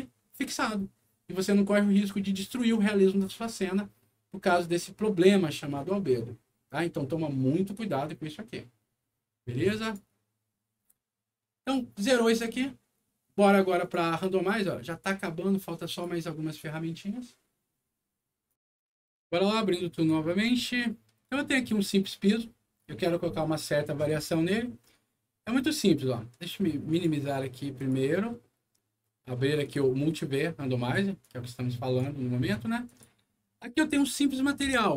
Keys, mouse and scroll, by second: 9.7 click, 12.2 click, 13.7 click, 14.8 click, 15.8 click, 18.4 click, 19.9 click, 21.1 click, 26.8 click, 27.7 click, 29.5 click, 31.1 click, 32.8 click, 33.5 middle click, 34.6 m.